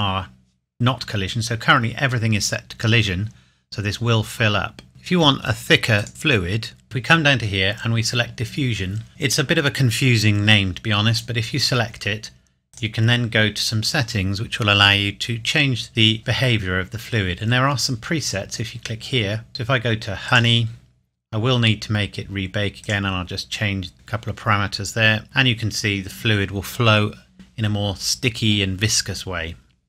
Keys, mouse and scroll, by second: 4.9 click, 6.8-8.4 scroll down 1, 11.1 click, 14.0-15.9 scroll down 1, 18.2 click, 20.3-20.6 scroll down 1, 21.4-22.8 scroll up 1, 22.8 click.